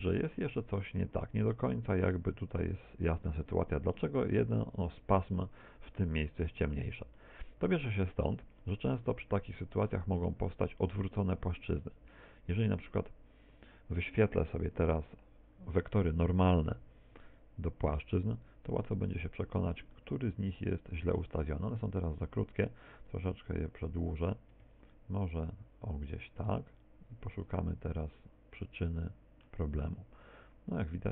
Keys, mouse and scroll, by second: 0.6 middle click, 6.0 middle click, 11.7 Tab, 12.4 Tab, 12.8 Tab, 14.7 n, 15.5-16.3 scroll down 1, 17.3 click, 18.4-19.2 scroll up 1, 19.2 scroll up 4, 19.3 shift+middle click, 20.0 middle click, 23.0 click, 28.2 middle click, 29.9 middle click.